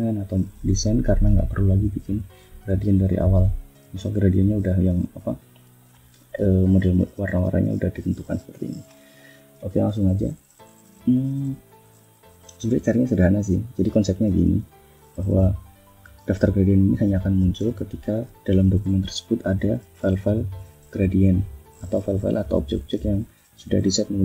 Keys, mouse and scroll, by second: 0.8 click, 1.9 click, 3.1 click, 4.1 click, 4.6 click, 5.1 click, 5.6 click, 7.7 click, 8.2 click, 8.7 scroll up 2, 9.0 click, 9.5 scroll down 2, 10.4 scroll down 2, 13.2 click, 14.1 click, 14.8 click, 17.3 click, 18.0 click, 18.4 click, 19.2 click, 19.7 click, 20.1 click, 20.5 click, 20.9 click, 21.4 click, 21.9 click, 22.6 click, 23.0 click, 23.5 click, 24.0 click.